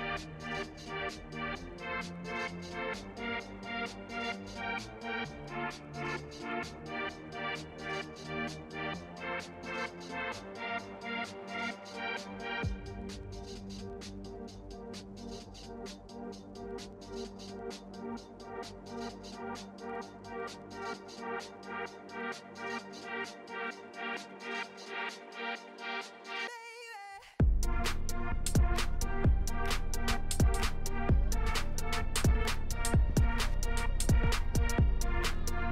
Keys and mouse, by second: 0.1 ctrl+z, 0.7-1.8 middle drag, 1.8 Tab, 2.2 middle click, 2.4 Tab, 2.7 middle click, 3.9 2, 4.2 click, 5.0 click, 5.6 ctrl+x, 5.9 middle click, 7.1 shift+middle click, 7.7 ctrl+r, 9.7 Tab, 9.9-10.7 middle drag, 10.8 Tab, 11.1 middle click, 12.2 ctrl+r, 14.3 Tab, 14.6-14.9 middle drag, 15.5 middle drag, 16.5 Tab, 17.0 shift+middle click, 17.5 2, 19.4 ctrl+x, 19.9 Tab, 20.1-20.6 middle drag, 21.1 KP_1, 21.6 click, 22.0 shift+click, 22.1 shift+middle click, 22.6 shift+middle drag, 23.6 ctrl+z, 23.9 ctrl+z, 24.7 ctrl+z, 24.8 ctrl+z, 25.0 ctrl+z, 25.2 ctrl+z, 25.3 ctrl+z, 25.6 ctrl+z, 25.8 ctrl+z, 26.1 ctrl+z, 26.5 ctrl+z, 27.2 middle click, 28.0 KP_1, 28.6 shift+middle click, 29.2 shift+middle click, 30.1 k, 33.4 z, 34.6 Tab, 34.9 click, 35.4 shift+drag.